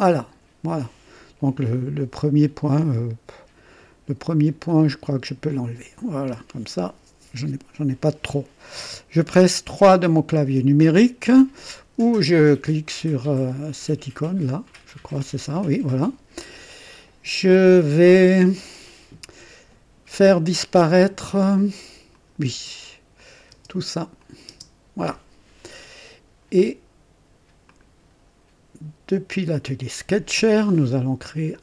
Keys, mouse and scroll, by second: 4.6 click, 6.2 Delete, 6.2 Delete, 14.1 click, 15.2 KP_3, 22.1 click, 22.5-24.8 typing, 23.2 click, 24.2 click, 27.7 typing, 29.5 click, 29.6 typing.